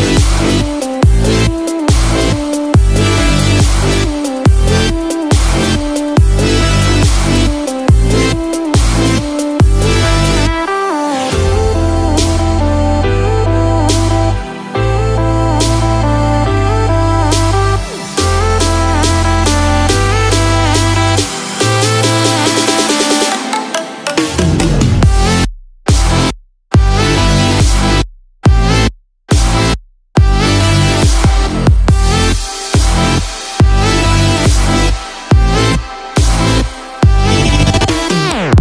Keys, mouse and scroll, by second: 0.1 middle click, 2.2 click, 3.7 scroll up 1, 4.9-5.8 scroll up 1, 5.8 click, 7.5 middle click, 9.4 g, 11.1 click, 12.8 Delete, 16.3 scroll up 2, 16.7 click, 17.8-18.1 scroll down 1, 18.1 middle click, 20.4 click, 20.4 g, 21.3 scroll down 1, 21.6-22.1 scroll up 4, 22.0 shift+middle click, 22.5 middle click, 23.1-23.6 scroll down 4, 23.6 middle click, 26.5 middle click, 26.9-28.0 scroll down 1, 28.4 middle click, 28.9-30.1 scroll down 2, 31.8 scroll down 1, 32.2 middle click, 37.7-38.2 scroll down 4, 38.1 middle click.